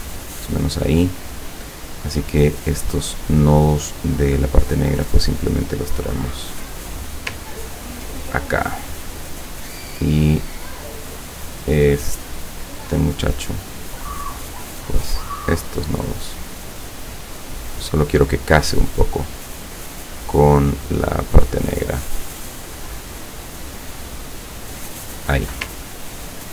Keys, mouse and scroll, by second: 0.8 click, 1.2 click, 2.2 click, 4.2-7.3 drag, 8.2 ctrl+click, 9.3 click, 11.0 click, 11.7 click, 12.4 click, 13.6 click, 15.0-18.3 drag, 19.0 click, 20.7-22.2 drag, 22.3 click, 24.3-25.6 drag, 26.0 ctrl+scroll down 2.